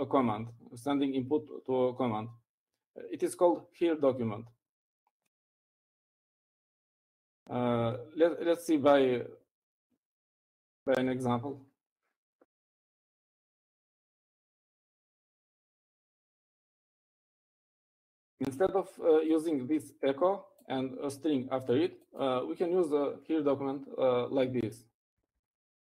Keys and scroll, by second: 15.1 typing, 16.3 typing, 17.5-18.8 typing.